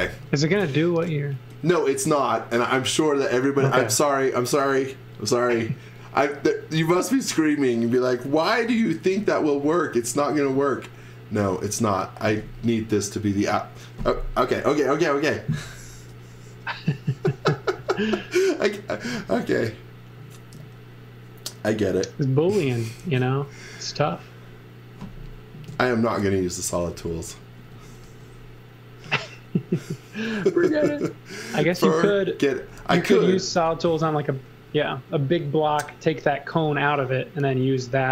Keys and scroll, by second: 10.1 space, 26.7 x, 27.0 v, 27.6 x, 28.0 v, 29.0 v, 30.4 space, 31.4-33.7 typing, 35.8 Delete, 36.8 space.